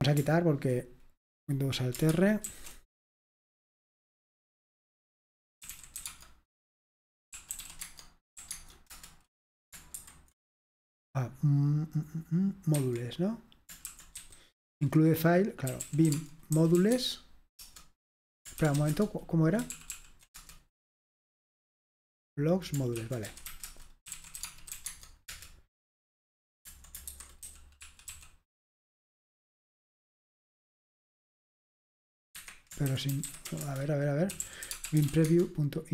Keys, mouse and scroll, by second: 2.5 alt+super+r, 5.5-10.0 typing, 12.8 Escape, 13.7-20.4 typing, 14.7 Return, 23.3-25.2 typing, 25.3 Return, 27.2-28.6 typing, 32.4 Escape, 32.7-35.9 typing.